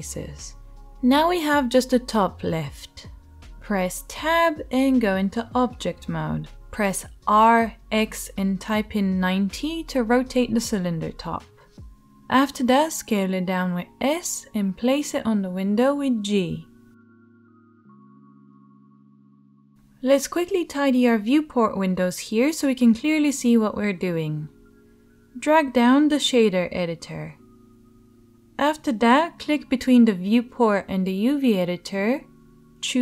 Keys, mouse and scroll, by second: 5.7 Tab, 7.0 r, 9.4-11.4 right drag, 10.1 g, 11.4-33.0 shift+drag, 12.7 g, 14.3 s, 15.5 g, 18.4 g, 24.7 middle click, 24.7 right click, 26.0-33.0 middle drag, 26.0-33.0 right drag.